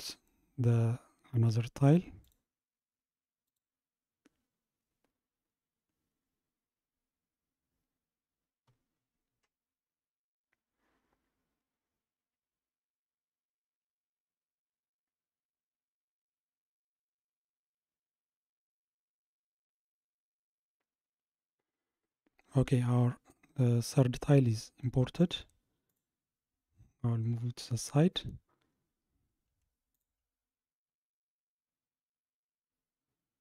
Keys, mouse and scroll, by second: 22.9-23.3 scroll down 1, 23.3-25.9 middle drag, 25.9 click, 26.8-30.0 scroll down 44, 30.0 shift+click.